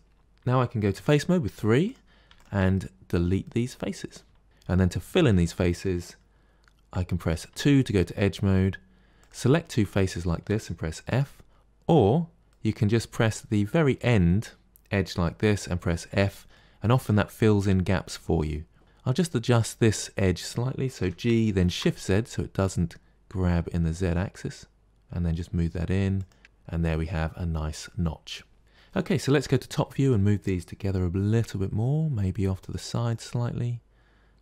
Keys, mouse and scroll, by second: 0.2 3, 0.8 3, 1.7 click, 2.2 shift+click, 2.6 scroll down 1, 3.3-4.4 middle drag, 4.4 shift+click, 4.4-7.1 middle drag, 7.4 2, 9.0 click, 10.0 shift+click, 11.0 f, 11.6 click, 12.4-14.7 middle drag, 15.1 middle click, 16.0 f, 16.5-18.8 middle drag, 18.8 click, 20.9 g, 26.4 scroll down 5, 26.7-28.6 middle drag, 29.2 KP_7, 29.9 click, 30.7 g, 33.0 click, 33.2 g.